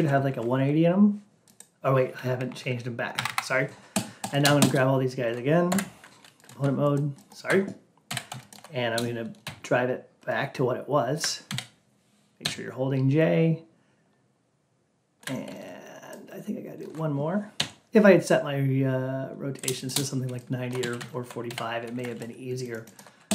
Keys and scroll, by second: 2.3 Down, 5.6 F8.